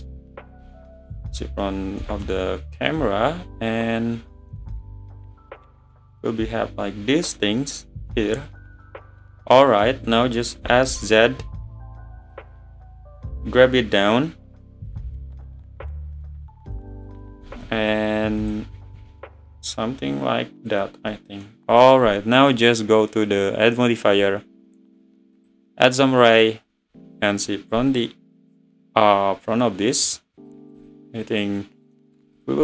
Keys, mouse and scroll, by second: 0.6 `, 2.0 s, 5.9 click, 8.3-8.8 middle drag, 8.8 scroll down 1, 8.8-10.6 middle drag, 10.6 s, 12.8 click, 14.9 `, 16.1 click, 17.4 s, 21.1-21.7 middle drag, 21.7 click, 22.5 click, 25.5 click, 26.9 `, 27.5 scroll up 2, 30.1-32.6 drag.